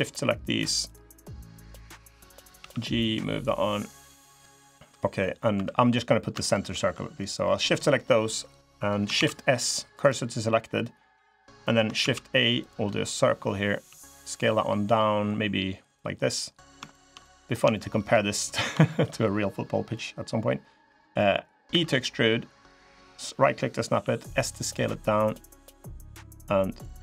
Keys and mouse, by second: 2.3 g, 4.5 middle click, 4.5 click, 4.7 middle click, 5.3 2, 5.6 click, 8.9 shift+s, 11.8 shift+a, 13.6 s, 16.7 shift+click, 17.0 middle click, 17.5 shift+middle click, 18.1 middle click, 21.5 e, 23.7 s, 26.1 3.